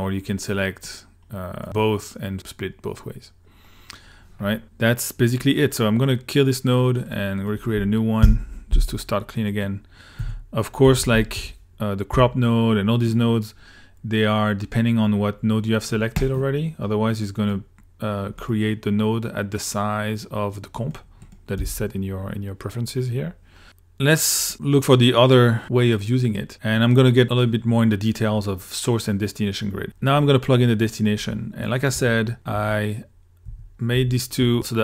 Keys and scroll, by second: 8.2 Delete, 10.2 Tab, 10.6-12.1 typing, 21.6 s, 29.8 ctrl+s, 32.0-34.8 typing.